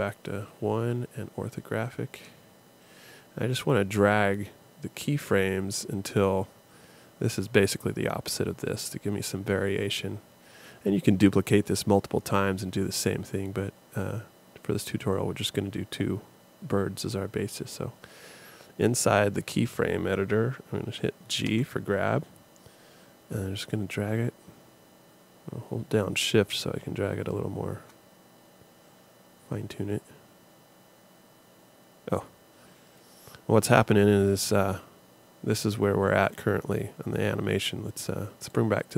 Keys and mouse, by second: 0.1 KP_1, 0.8 KP_5, 21.5 g.